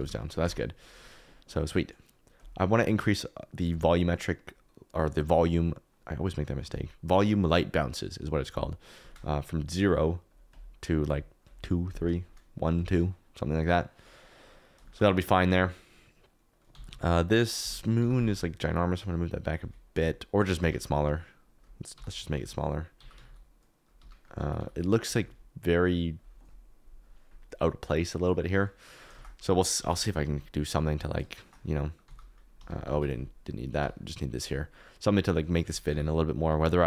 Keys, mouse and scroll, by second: 0.4 Tab, 11.0 click, 12.7 click, 14.8 shift+middle click, 16.7-18.2 typing, 17.6 Escape, 19.6 ctrl+z, 19.9 s, 20.5 Escape, 21.6 click, 22.3-25.2 typing, 23.9 Escape, 29.1 shift+a, 31.3 shift+click, 32.0 g, 32.9 ctrl+z, 33.7 g.